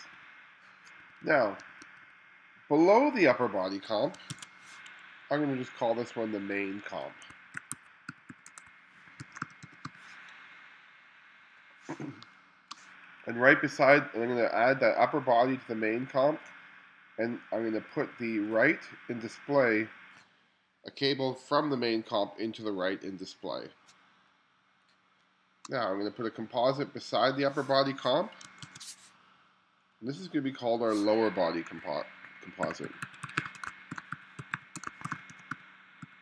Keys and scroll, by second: 0.0 1, 1.1 2, 4.4 super+v, 7.3-10.4 typing, 12.3 space, 25.3 space, 28.7 super+v, 32.4-36.2 typing.